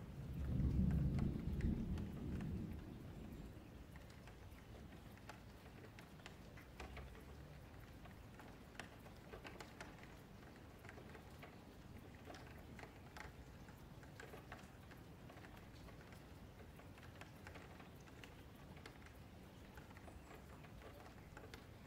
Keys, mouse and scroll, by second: 1.2 shift+a, 2.5-3.7 drag, 3.7-4.9 middle drag, 4.9 F3, 5.4-7.4 middle drag, 7.4 click, 9.0 click, 10.6 click, 11.3-12.2 middle drag, 12.2 F3, 12.8 s, 14.7 s, 16.2 scroll down 3, 16.5-16.9 middle drag, 16.9 F3, 17.2 scroll up 1, 17.3-17.9 middle drag, 17.9 scroll down 5, 18.1-19.5 middle drag, 19.5 Tab, 19.7-20.0 scroll up 2, 20.0 F3, 20.5 i, 20.7 click.